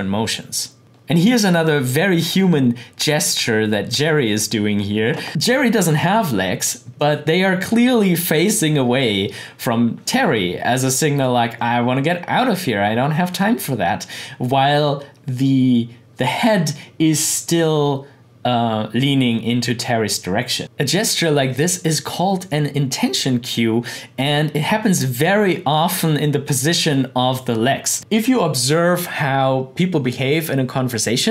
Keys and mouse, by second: 2.9 click, 23.5-28.0 drag.